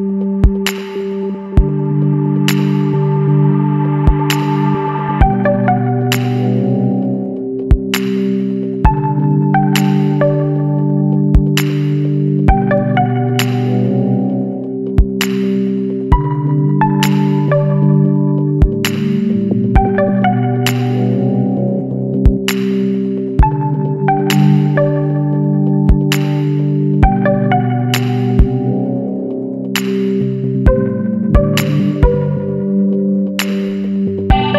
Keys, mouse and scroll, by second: 0.3-3.0 drag, 3.0 scroll down 1, 3.1-3.4 middle drag, 3.4 alt+a, 3.8 scroll down 1, 3.9-4.4 middle drag, 4.4 ctrl+s, 4.7-5.4 middle drag, 5.4-5.8 scroll up 2, 5.8-7.8 middle drag, 7.8 click, 8.4-10.6 shift+middle drag, 10.6 scroll down 1, 10.7-11.6 middle drag, 11.6-12.0 scroll up 2, 12.0 click, 12.3-12.9 middle drag, 12.9-13.6 scroll up 2, 14.2 click, 14.6-15.4 middle drag, 15.4 h, 16.8 click, 17.1 Tab, 18.3 ctrl+r, 20.7-23.3 middle drag, 23.3 ctrl+b, 27.5 alt+shift+click, 28.1-29.0 ctrl+middle drag, 29.0 g, 33.0 alt+h, 33.5 alt+a, 33.9-34.2 scroll down 2, 34.2-34.5 middle drag.